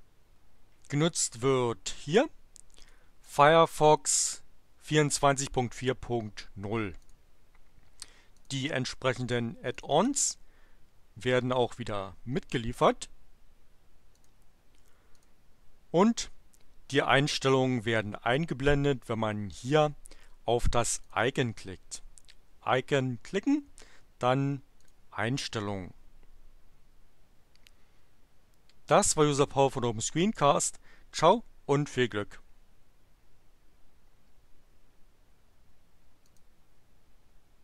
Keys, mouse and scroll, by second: 1.4 click, 2.6 click, 3.6 click, 7.0 click, 8.3 click, 9.7 click, 14.1 click, 15.1 click, 21.0 click, 24.8 click, 36.2 click.